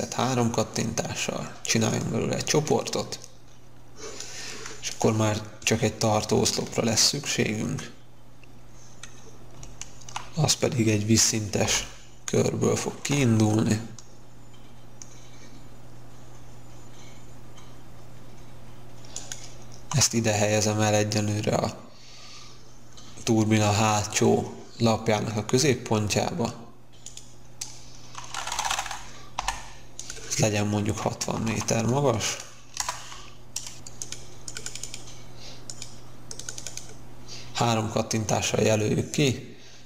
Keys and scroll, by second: 11.6 c, 29.3 p, 30.9-31.8 typing, 32.7 Return.